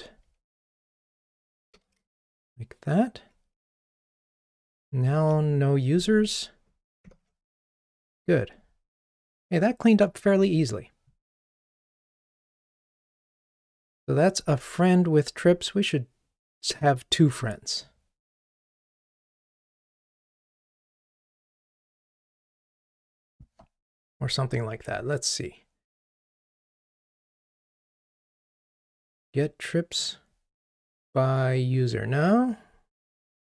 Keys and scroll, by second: 1.4 super+BackSpace, 5.2 super+b, 7.1 super+BackSpace.